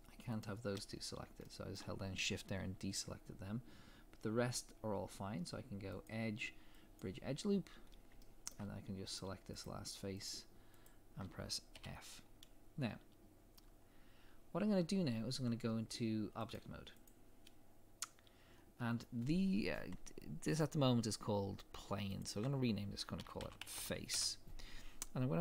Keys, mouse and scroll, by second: 1.0 scroll down 1, 1.4 shift+middle click, 7.0 click, 7.8 scroll up 1, 8.2 shift+middle click, 9.1 click, 9.6 shift+click, 11.7 f, 12.2 scroll down 1, 17.0 click, 24.1 ctrl+click, 24.2 Return.